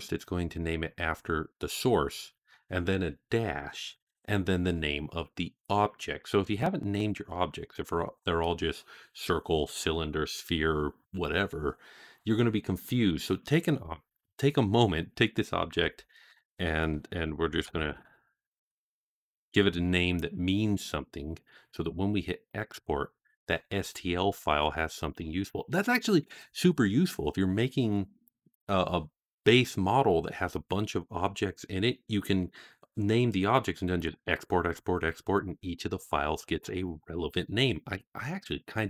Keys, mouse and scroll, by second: 15.6 F2, 22.3-24.4 drag.